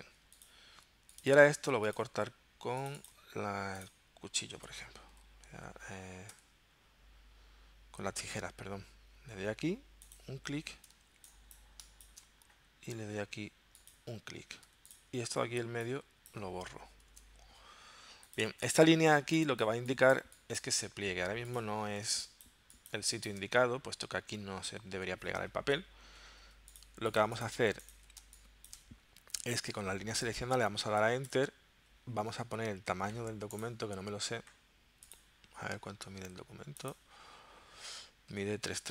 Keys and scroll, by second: 5.1 k, 6.3 c, 11.0 space, 14.6 v, 17.1 BackSpace, 19.2 space, 22.1 space, 26.3 z, 28.3 space, 29.6 v, 31.3 Return.